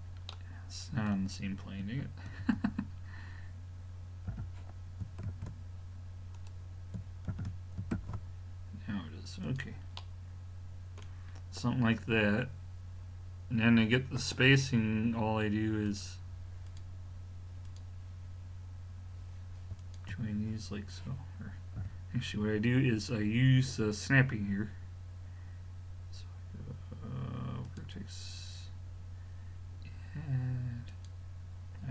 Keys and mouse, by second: 2.3 ctrl+z, 4.3 g, 7.3 shift+d, 15.9-19.4 drag, 19.8-21.6 drag, 21.8 a, 23.9-25.7 drag, 30.9-31.9 drag.